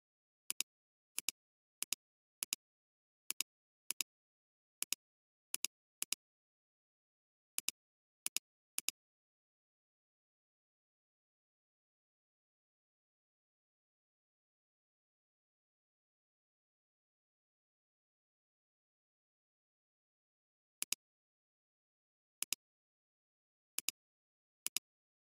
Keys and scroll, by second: 4.8 space, 6.9 ctrl+z, 20.8 alt+space, 21.4 alt+space, 22.5 alt+space, 23.1 alt+space, 23.7 alt+space.